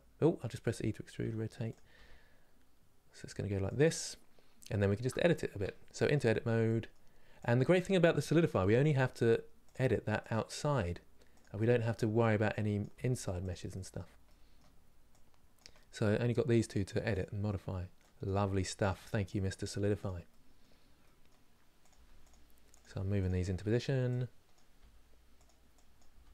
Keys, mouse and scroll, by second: 3.8 scroll up 1, 4.5 shift+middle click, 5.0-5.3 scroll up 2, 5.3 Tab, 5.6-7.6 middle drag, 7.6 click, 8.5 g, 10.2 click, 10.3 g, 11.7 middle click, 12.5 click, 12.7 g, 13.5-15.3 middle drag, 15.3 click, 15.4 middle click, 15.9 g, 17.9 click, 18.1 g, 19.2 click, 19.3 g, 20.0-21.6 middle drag, 21.6 click, 21.6 g, 22.5 click, 22.6 g, 23.2-24.2 middle drag, 24.2 click, 24.5 g, 25.7 click, 25.9 g.